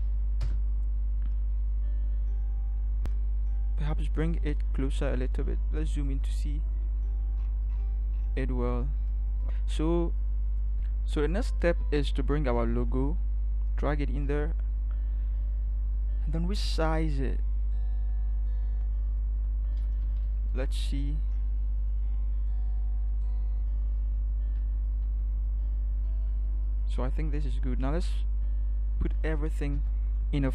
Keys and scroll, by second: 0.4 Return, 5.7 ctrl+=, 6.1 ctrl+=, 10.7 ctrl+v, 19.8 alt+shift+Return, 24.7 Up, 25.0 Up, 29.7 ctrl+g.